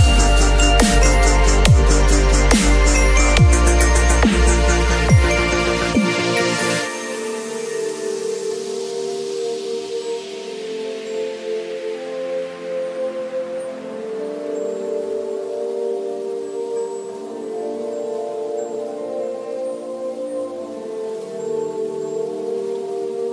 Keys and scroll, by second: 0.4 ], 3.7 v, 4.2 ctrl+[, 5.9 b, 9.3 ], 11.7 [, 15.6 v, 22.0 space, 22.1 ctrl+a, 22.3 ctrl+c, 22.5 ctrl+w, 22.7 ctrl+v, 23.2 ctrl+t.